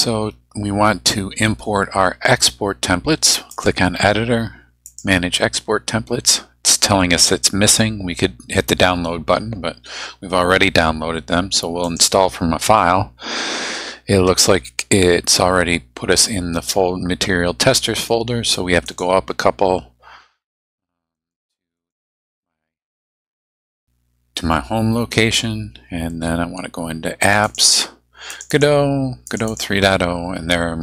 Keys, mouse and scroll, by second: 3.5 click, 4.8 click, 11.8 click, 18.9 click, 21.2 click, 21.8 click, 27.2 click, 28.3 click, 29.3 click.